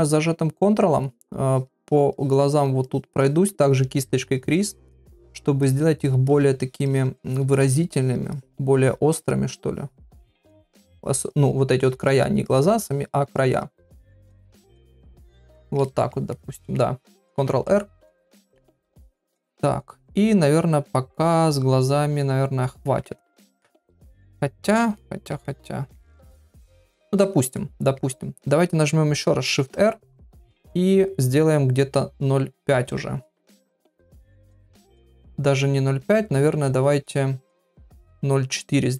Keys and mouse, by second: 1.5 ctrl+click, 1.8 ctrl+click, 2.1 ctrl+click, 2.5 ctrl+click, 2.9 ctrl+click, 3.2 ctrl+click, 4.1 ctrl+click, 4.4 ctrl+click, 4.7 ctrl+click, 5.0 ctrl+click, 5.3 ctrl+click, 5.6 ctrl+click, 6.0 ctrl+click, 6.2 ctrl+click, 6.6 ctrl+click, 6.9 ctrl+click, 7.2 ctrl+click, 7.5 ctrl+click, 7.9 ctrl+click, 8.3 ctrl+click, 8.7 ctrl+click, 9.2 ctrl+click, 9.7 ctrl+click, 9.9 ctrl+click, 10.2 ctrl+click, 10.5 ctrl+click, 11.0 ctrl+click, 11.3 ctrl+click, 11.8 ctrl+click, 12.1 ctrl+click, 12.4 ctrl+click, 12.9 ctrl+click, 13.4 ctrl+click, 13.8 ctrl+click, 14.4 ctrl+click, 14.8 ctrl+click, 15.0 ctrl+click, 15.3 ctrl+click, 15.8 ctrl+middle click, 16.3 middle click, 18.6 ctrl+r, 19.0-23.0 middle drag, 23.2 ctrl+middle click, 23.6 middle click, 25.0 ctrl+middle click, 25.4-26.8 middle drag, 27.0 ctrl+middle click, 27.6 middle click, 29.4 shift+r, 32.9 click, 33.5 shift+r, 36.5 shift+r.